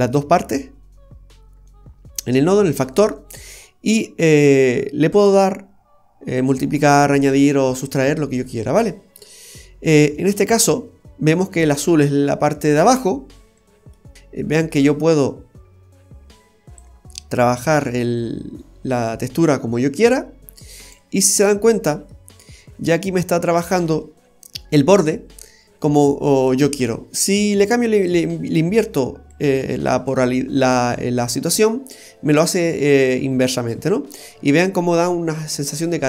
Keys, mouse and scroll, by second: 1.6-3.0 scroll up 4, 3.6 scroll up 1, 5.1 click, 7.5-7.8 scroll down 1, 7.8 middle click, 8.4-8.7 scroll up 1, 8.9 middle click, 10.0 scroll up 1, 13.8 scroll down 1, 13.9 middle click, 14.1-14.7 scroll up 1, 14.8 click, 17.6 click, 21.4-21.7 scroll up 1, 21.7 middle click, 21.7-22.1 scroll down 1, 22.3-22.7 scroll up 2, 22.8 middle click, 27.3 click, 29.3 click, 31.3 scroll down 1, 31.6 middle click, 34.3-34.7 scroll down 1, 35.6 scroll down 4, 35.8 middle click.